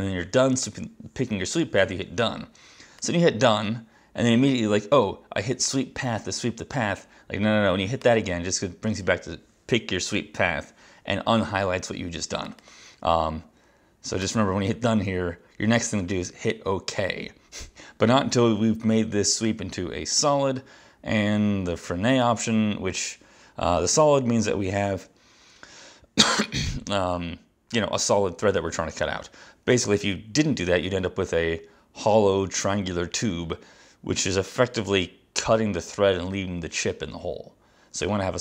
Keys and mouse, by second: 8.2 click, 12.6 click, 12.7 click, 14.3 click, 20.3 click, 22.3 click.